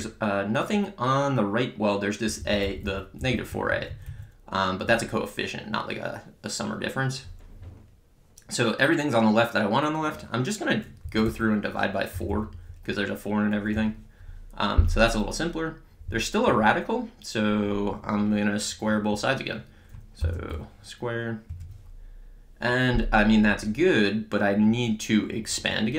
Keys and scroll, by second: 0.0 Left, 3.5 Right, 11.1 Down, 11.9-12.8 typing, 13.7 Return, 20.2 ^, 20.5 2, 21.5 Return.